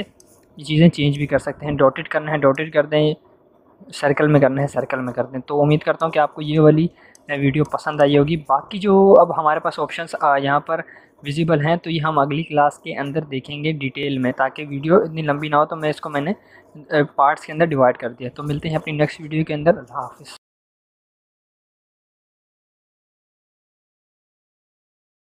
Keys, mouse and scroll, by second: 5.9-8.5 drag.